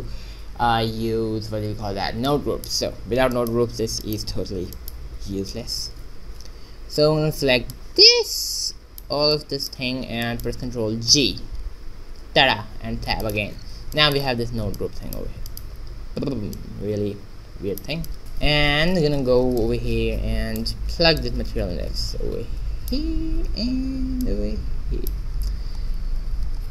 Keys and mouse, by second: 0.4 shift+z, 3.6 middle click, 5.0 a, 5.8 ctrl+b, 7.4 b, 9.4 middle click, 10.2 middle click, 11.0 ctrl+g, 12.3 Tab, 16.5-18.2 drag, 18.2 Tab, 21.1 click, 21.8-23.1 drag, 24.2-26.2 drag.